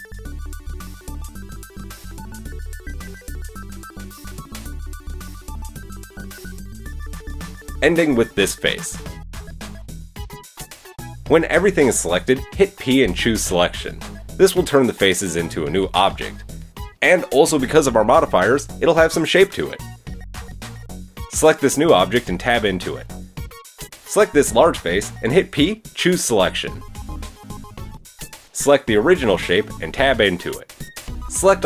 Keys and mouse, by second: 3.4 shift+middle click, 4.1 middle click, 5.3 shift+click, 7.5 shift+click, 12.4 p, 14.8 Tab, 15.9 click, 15.9 middle click, 15.9 right click, 17.1-19.2 right drag, 21.0 Tab, 21.4 Tab, 25.5 p, 26.4 Tab, 27.2-27.5 drag, 30.3 Tab, 30.7 Tab.